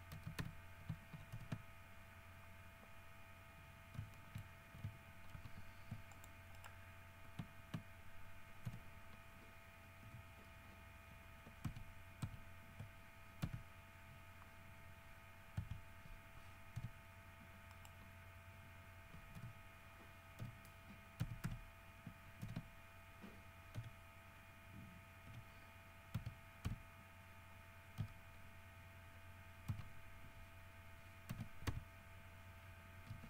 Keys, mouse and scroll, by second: 0.3 alt+shift+x, 0.6 f, 1.5 alt+h, 4.0 middle click, 4.3 shift+middle click, 5.5 ctrl+r, 6.3 ctrl+middle click, 6.7 ctrl+middle click, 8.9 h, 10.2 l, 11.9 ctrl+z, 13.6 x, 15.8 1, 17.0 g, 17.9 right click, 19.6 h, 20.6 l, 21.4 x, 21.6 v, 22.6 alt+h, 23.9 l, 25.5 l, 26.3 w, 26.9 r, 27.5-27.9 scroll down 2, 29.9 ctrl+z, 31.5 ctrl+v, 31.9 ctrl+d, 32.5-33.1 ctrl+scroll down 5.